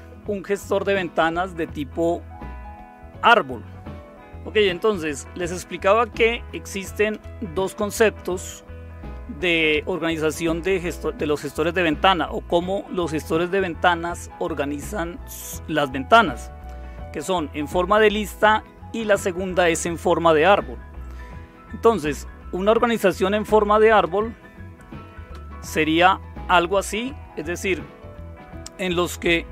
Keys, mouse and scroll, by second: 5.9 Left, 6.5 Left, 7.1 Left, 22.8 Right, 23.2 Right, 24.0 Right, 25.3 Right, 29.1 Left.